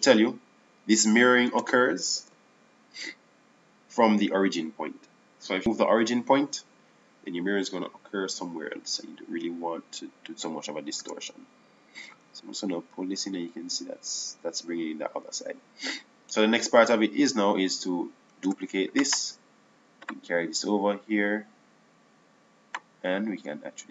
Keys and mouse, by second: 3.9 KP_7, 12.9 Tab, 14.7-16.7 drag, 20.1 shift+d, 22.0 click.